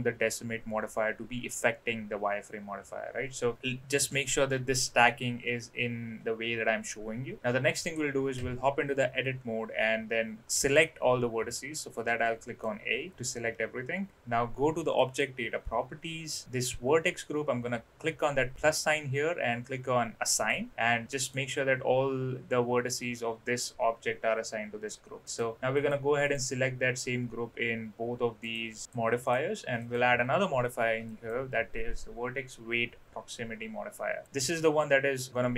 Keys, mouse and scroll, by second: 7.9 click, 8.3 Tab, 11.2 a, 12.1 middle click, 15.0 click, 20.2 click, 20.7 Tab, 21.0 middle click, 25.3 click, 25.7 click, 28.5 click, 28.8 click, 29.2 click, 29.8-31.3 drag, 34.2-35.5 drag.